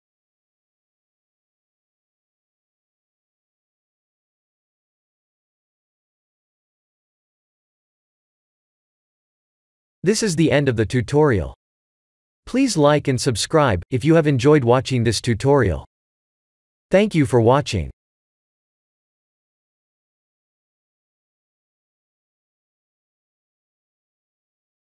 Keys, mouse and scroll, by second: 5.9 click, 6.6 ctrl+s.